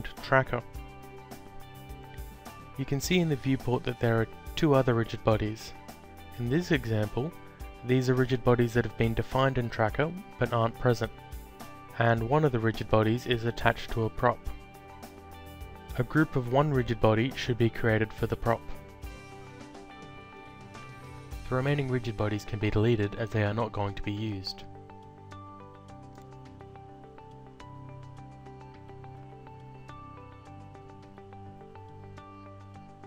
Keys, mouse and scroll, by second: 4.6 click, 9.2 click, 11.2 click, 14.4 click, 15.4 click, 16.5-17.9 typing, 19.7 click, 21.9 ctrl+click, 24.4 click, 26.2 click, 27.3 click, 32.3 alt+click.